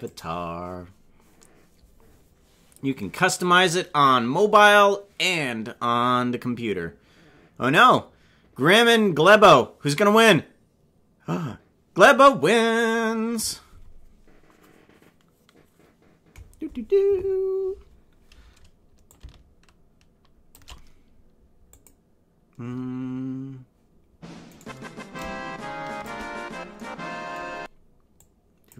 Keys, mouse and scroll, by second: 19.1-20.5 shift+drag, 21.7 click, 24.6 right click, 25.1 shift+click, 28.1 click.